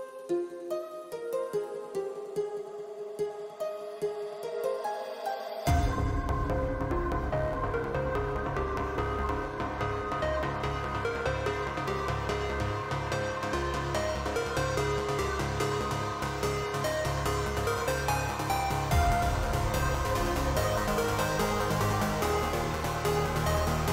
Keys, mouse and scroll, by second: 0.6 right click, 2.3 middle click, 2.8 middle click, 3.7 click, 4.6 shift+a, 7.5 click, 8.1 ctrl+t, 8.7 click, 8.9 click, 13.4 click, 14.6 ctrl+z, 16.5 click, 19.6 shift+middle click, 20.4-22.3 drag, 23.0 click.